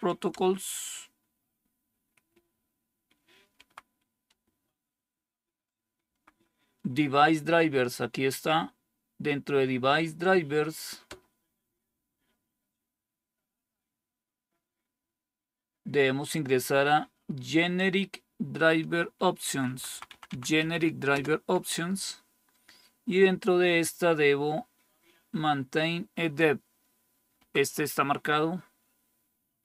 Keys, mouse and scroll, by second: 0.2 Return, 3.4 Right, 4.2 Return, 6.0 Down, 11.0 Return, 19.4 Down, 19.8 Down, 19.9 Down, 20.0 Down, 20.2 Down, 20.5 Up, 21.0 Return, 27.3 Down.